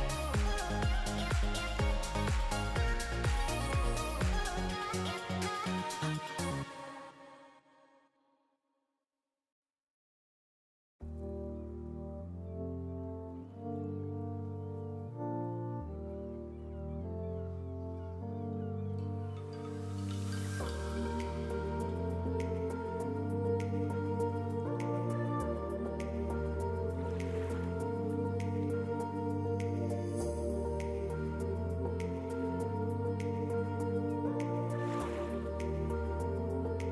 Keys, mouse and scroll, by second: 0.0 shift+middle click, 0.2 middle click, 0.6 3, 1.1 click, 6.9-7.5 scroll up 1, 7.5 scroll down 3, 7.8 Tab, 7.8-8.2 scroll down 1, 8.4 alt+a, 13.7 scroll down 1, 13.9 shift+middle click, 14.2 middle click, 14.5 shift+middle click, 17.9 click, 18.5 Tab, 26.0 click, 28.2 alt+a, 28.5 middle click, 31.9 click, 33.7 click, 34.2 Tab, 34.4 middle click, 35.9-36.2 scroll up 2.